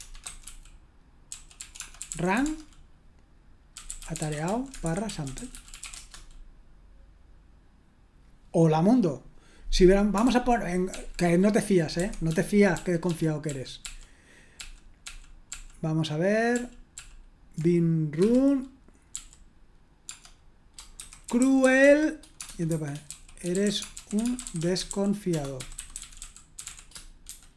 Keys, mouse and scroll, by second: 0.0-6.3 typing, 10.2 ctrl+p, 10.9 ctrl+p, 12.0 ctrl+c, 12.7 ctrl+`, 13.8 ctrl+p, 14.5 ctrl+p, 15.0 ctrl+p, 15.5 ctrl+p, 16.5 ctrl+p, 16.9 ctrl+p, 18.2 Return, 19.1-27.5 typing.